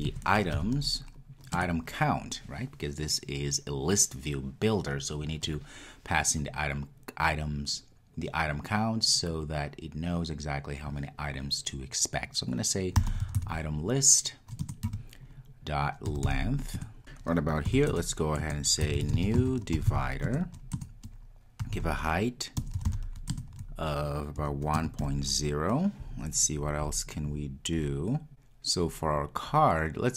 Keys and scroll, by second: 1.7 Return, 14.9 Return, 20.4 Return.